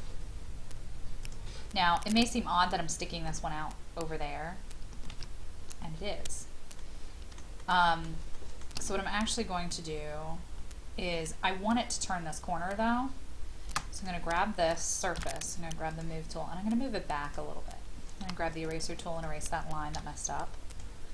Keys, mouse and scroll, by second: 1.2 click, 5.1 ctrl+z, 6.3-6.8 scroll up 1, 6.8-8.0 middle drag, 8.3 shift+middle click, 8.9-9.7 scroll up 1, 9.7-11.0 scroll down 1, 14.0 click, 15.2 m, 15.9 click, 18.2 e, 18.6 click, 19.9 |, 20.7 click.